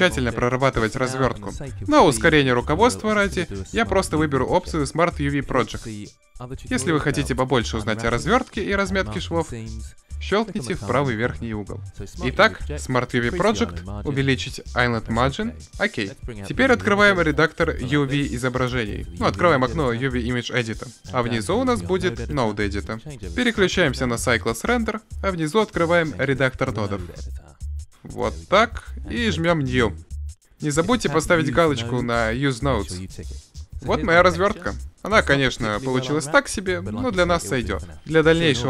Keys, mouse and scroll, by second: 0.6 u, 15.3-19.3 drag, 20.3 click, 21.0-21.7 drag, 22.6-24.6 drag, 25.6-26.9 drag, 28.9-33.4 drag.